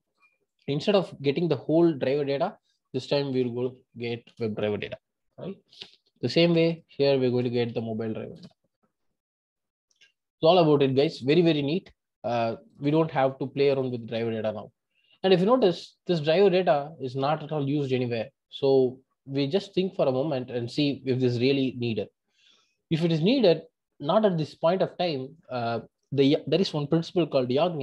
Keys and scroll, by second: 4.6 Return, 8.7 Return.